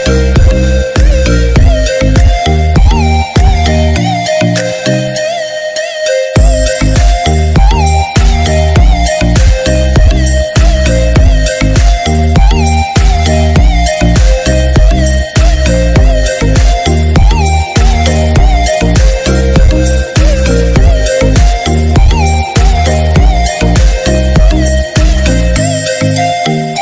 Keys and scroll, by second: 11.2 ctrl+=, 12.7 ctrl+-, 14.6 ctrl+=.